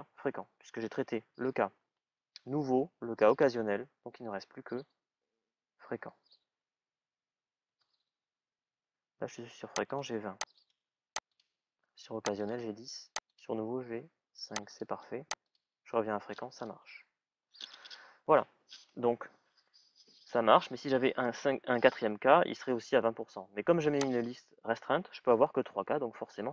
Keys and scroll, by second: 0.3 shift+à, 0.9 shift+ù, 7.5 Return.